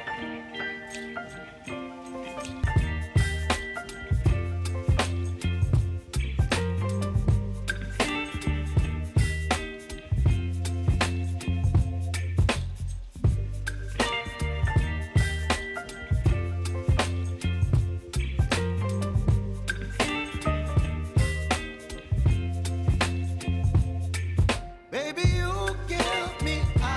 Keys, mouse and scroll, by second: 0.4 [, 1.5 click, 2.6 [, 3.2 click, 3.9-5.7 typing, 7.4 space, 9.4 space, 10.4 click, 11.2 ctrl+y, 11.9 Return, 12.7 click, 13.1 space, 15.4 n, 16.9 click, 17.2 n, 17.7 click, 17.9 right click, 18.6 click, 23.4 s, 24.0 click, 24.6 s, 25.4 click, 25.6 space, 26.8 click.